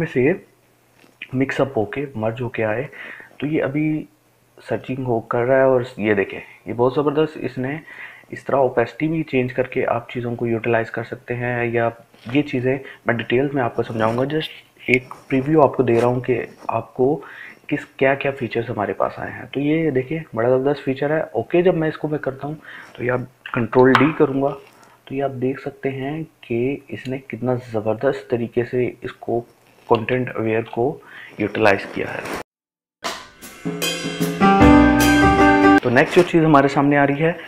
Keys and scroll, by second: 22.6 ctrl+d.